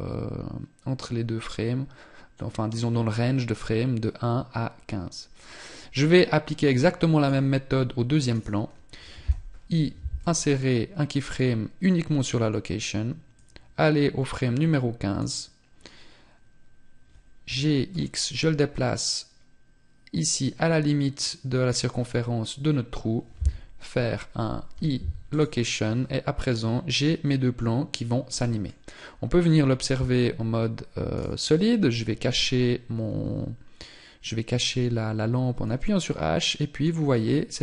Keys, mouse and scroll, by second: 30.6 right click, 32.8 scroll up 3.